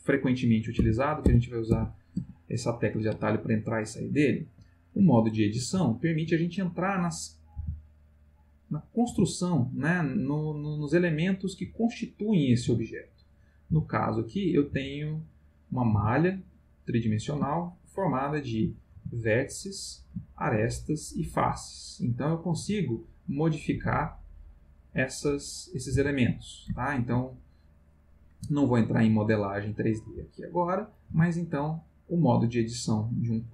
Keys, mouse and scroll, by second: 0.8 Tab, 3.2-4.6 ctrl+middle drag, 5.2 shift+middle click, 6.1 ctrl+middle click, 7.0 click, 7.6 g, 8.5 click, 8.9 click, 9.1 g, 9.8 click, 11.4 click, 11.6 g, 12.1 click, 12.6 click, 12.6 g, 13.1 click, 13.6 click, 13.7 g, 14.1 click, 14.6 click, 14.7 g, 15.4 click, 15.9 g, 16.4 click, 17.3 shift+middle click, 18.7 click, 18.9 g, 19.8 click, 20.4 shift+click, 21.6 middle click, 22.4 click, 22.6 g, 23.1 click, 23.5 click, 23.7 g, 24.1 click, 24.5 middle click, 25.7 click, 25.9 g, 26.4 click, 26.8 shift+middle click, 28.1 middle click, 29.1 ctrl+middle click, 29.9 click, 30.1 g, 30.5 click, 31.0 click, 31.1 g, 31.6 click, 32.2-33.5 middle drag.